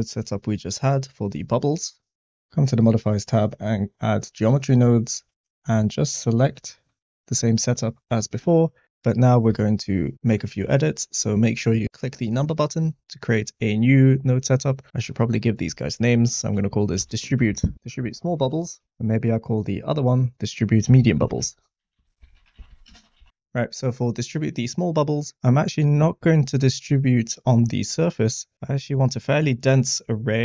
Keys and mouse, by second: 1.6 click, 2.5-3.6 drag, 5.1-6.5 drag, 9.5 click, 10.4 middle click, 14.1-18.8 drag, 18.6 BackSpace, 18.8 l, 18.8 b, 20.3-23.3 shift+drag, 22.0 BackSpace, 23.3 b.